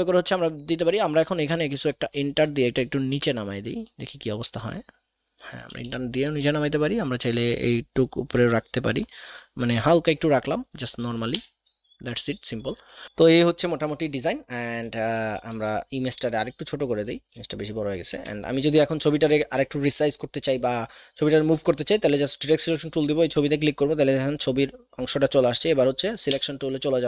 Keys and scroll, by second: 1.8 Left, 2.3 Return, 2.7 Return, 3.3 Return, 3.8 Return, 4.4 Return, 5.6 BackSpace, 6.2 BackSpace, 7.5 BackSpace, 11.4 v, 18.1 a, 26.4 v.